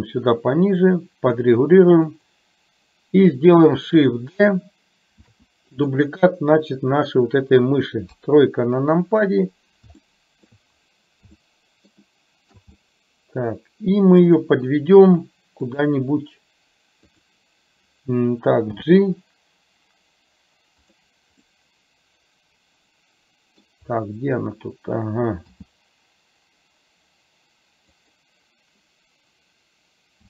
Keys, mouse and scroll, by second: 2.2 click, 5.3 shift+d, 8.2 KP_3, 10.2-10.6 middle drag, 11.6-12.1 shift+middle drag, 12.2 shift+middle click, 12.9-14.3 middle drag, 14.4 middle click, 18.9 g, 21.4-23.7 middle drag, 21.4 scroll up 1, 25.7 g.